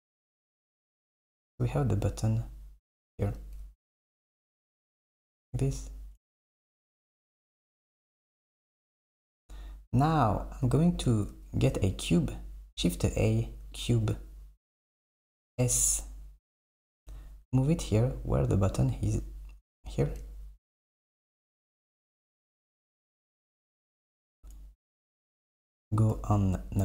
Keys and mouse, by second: 4.3 middle click, 7.5 Tab, 9.0 s, 10.5 Right, 11.2 shift+a, 15.4 s, 17.1 g, 21.1 g, 23.5 s, 25.4 a, 26.2 KP_1.